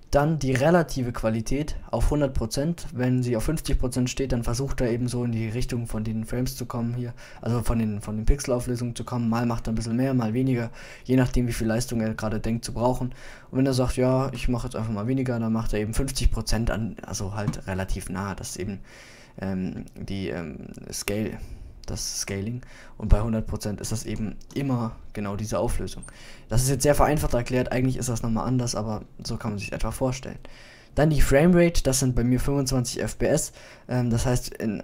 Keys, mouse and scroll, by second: 0.6-1.6 middle drag, 6.2-9.6 middle drag, 11.7 middle click, 15.5-16.0 middle drag, 21.4 middle click, 23.8 middle click, 31.3-33.1 drag.